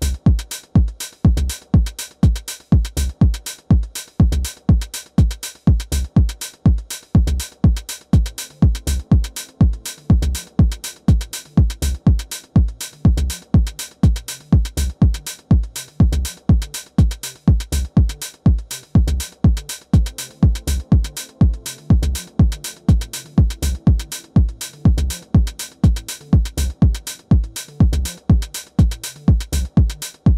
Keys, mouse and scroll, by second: 1.9-3.7 middle drag, 3.8-6.9 drag, 7.0-8.8 drag, 11.0-16.7 middle drag, 15.4 KP_1, 16.4 KP_5, 18.0 Tab, 20.1 r, 23.4-25.6 middle drag, 26.3-30.3 drag, 29.5-30.3 right drag.